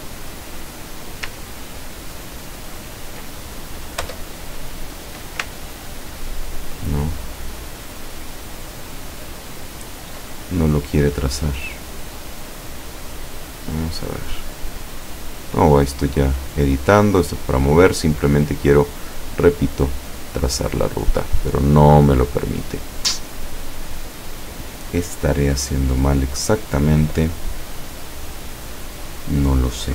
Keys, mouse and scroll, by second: 2.0 ctrl+click, 4.1 Return, 5.9 ctrl+click, 7.4 ctrl+click, 13.5 click, 16.6 click, 17.3 click, 20.8 click, 29.7 click.